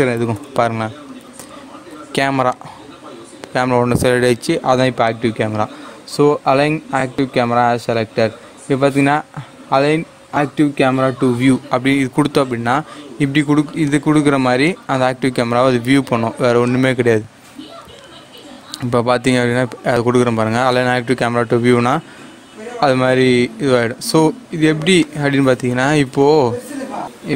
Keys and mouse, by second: 0.2 shift+a, 2.4 click, 5.0 click, 13.8 click, 20.6 click, 24.9-27.0 drag.